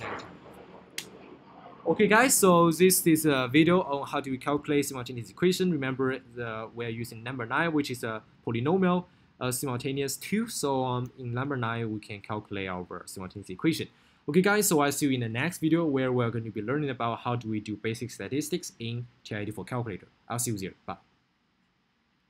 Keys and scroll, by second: 0.2 Return, 11.6 Up, 11.9 Down, 12.9 Up.